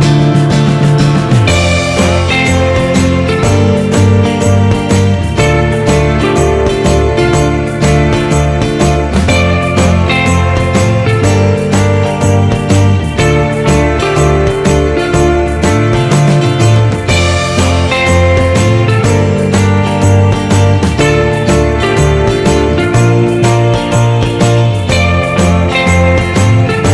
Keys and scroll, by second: 22.8 ctrl+-, 23.1 ctrl+0.